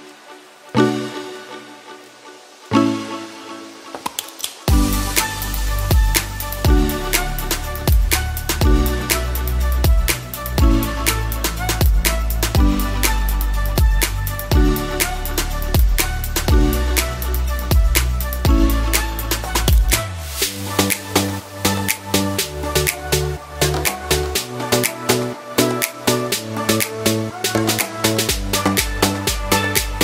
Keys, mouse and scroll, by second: 0.2 middle click, 0.6 scroll up 1, 0.9 shift+middle click, 3.4 click, 4.6 scroll up 2, 5.0 shift+middle click, 5.6 scroll down 1, 6.7 click, 10.5-11.9 scroll down 1, 12.2 click, 17.5 click, 19.7 click, 22.2 scroll up 2, 22.5 shift+middle click, 22.9 middle click, 24.2 shift+middle click.